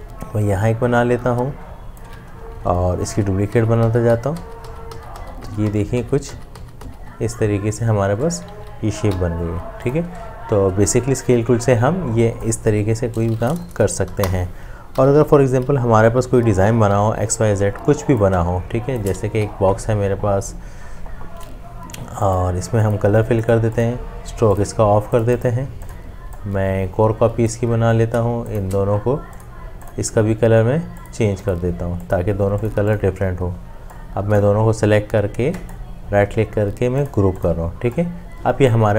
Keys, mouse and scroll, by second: 2.5 alt+shift+click, 3.1 ctrl+d, 9.1 v, 14.1 Delete, 16.9 m, 18.5 shift+click, 26.4 alt+click, 28.1 alt+click, 28.5 shift+click, 35.6 right click.